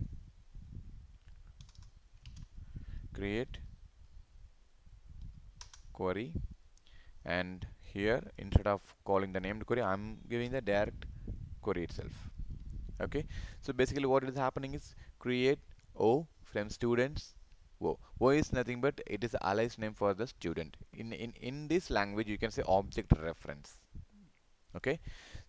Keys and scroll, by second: 2.5 ctrl+space, 10.4 ctrl+v, 12.5 ctrl+s.